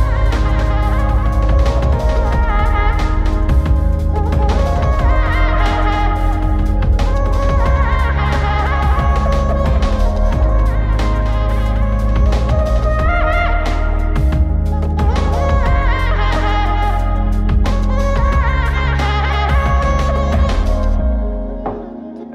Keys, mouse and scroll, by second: 0.4-2.1 right drag, 3.3-4.8 right drag, 6.2 right click, 8.3 click, 10.5 click, 11.1-13.7 drag, 11.1 right click, 14.8 click, 15.5 click, 16.3 click, 16.8 click, 17.5-17.9 scroll down 4, 18.7 click, 21.6 click.